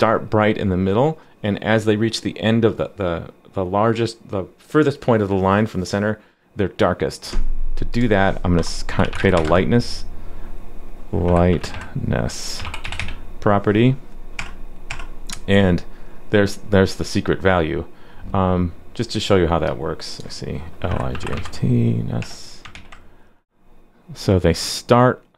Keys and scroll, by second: 22.7 super+s.